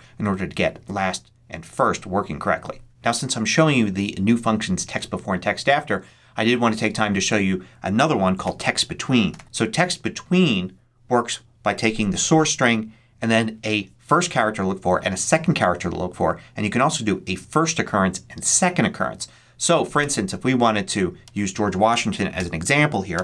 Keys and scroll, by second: 8.3-9.9 typing, 22.2 ', 23.0 shift+,.